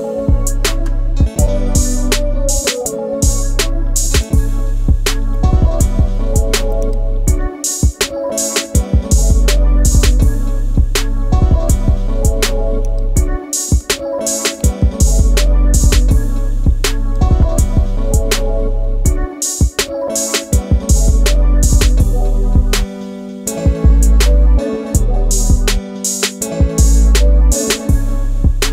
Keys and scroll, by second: 0.2 space, 4.0 space, 6.7 alt+shift+space, 12.7 alt+shift+space, 13.6-17.1 space, 15.1 ctrl+space, 18.8 shift+space.